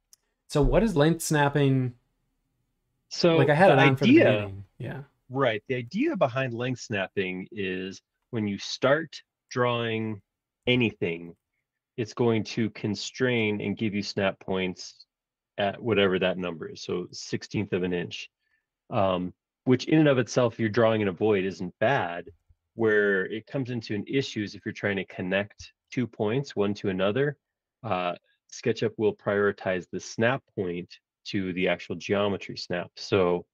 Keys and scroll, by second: 16.1 Escape, 22.2-22.8 typing, 25.6 l.